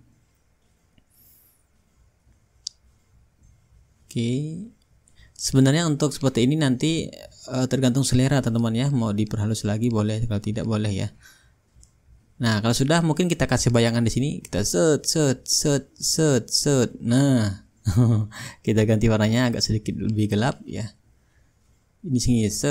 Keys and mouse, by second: 2.8-8.5 drag, 8.7-12.5 drag, 12.6-14.6 drag, 15.0-19.1 drag, 19.4-21.9 drag, 22.0-22.7 drag.